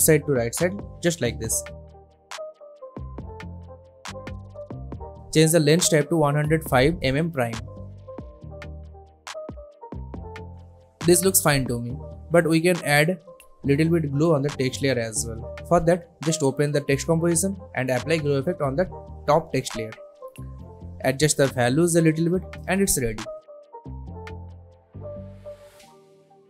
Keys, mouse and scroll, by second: 1.1-2.4 drag, 3.4 space, 5.4 space, 6.4 click, 9.4-11.8 drag, 14.2-15.3 typing, 16.0-19.2 drag, 25.3-26.4 drag.